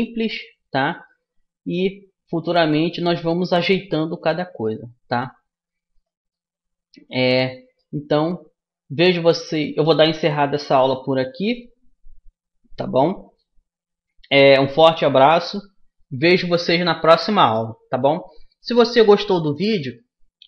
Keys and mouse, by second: 1.0 middle click, 1.8 click, 1.9 middle click, 2.7 middle click, 3.3-5.1 middle drag, 5.1 middle click, 5.9 right click, 6.3-7.9 drag, 6.3-20.4 middle drag.